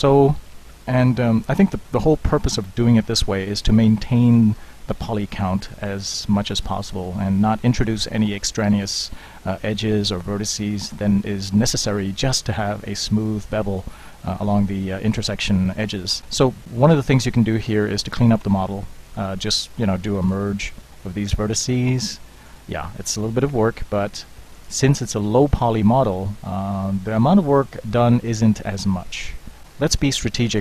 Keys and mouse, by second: 0.8 middle drag, 1.1 middle click, 3.5 middle click, 7.1-8.0 middle drag, 11.6-16.7 middle drag, 20.3 alt+m, 24.1 alt+m, 29.7-30.5 ctrl+z.